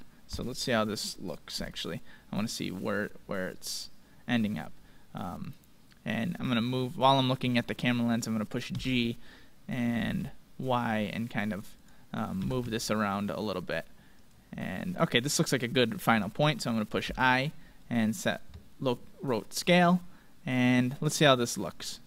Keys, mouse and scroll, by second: 2.7-3.8 scroll up 2, 3.8-5.0 middle drag, 5.0 scroll down 2, 5.2-7.0 middle drag, 7.4-9.3 middle drag, 8.7 g, 9.3 scroll up 2, 12.4 g, 17.0 i, 19.8-21.8 drag.